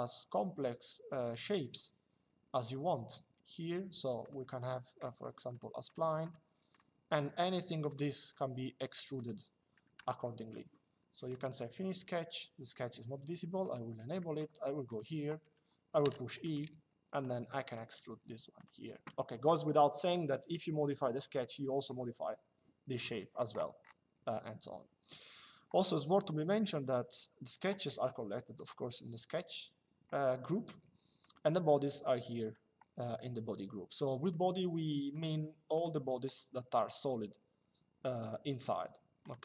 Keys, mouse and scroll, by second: 4.0 click, 7.6 click, 9.7 Escape, 11.0 click, 13.3 click, 13.9 middle click, 14.6 click, 15.7 e, 16.1 middle click, 18.3 click, 27.3 click, 31.0 click, 32.2 click, 33.9 click, 38.9 click.